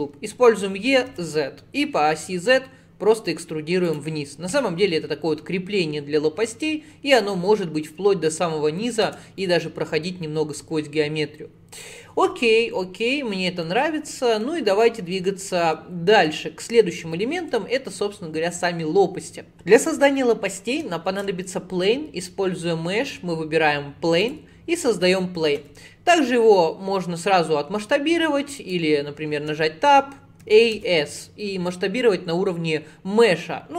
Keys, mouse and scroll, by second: 0.5 e, 4.6-6.9 middle drag, 6.9-7.2 scroll down 1, 7.2-9.1 middle drag, 9.1 Tab, 9.4-12.5 middle drag, 13.7-18.2 middle drag, 21.1 shift+a, 25.6 s, 29.4 Tab, 30.5 a, 30.8 s.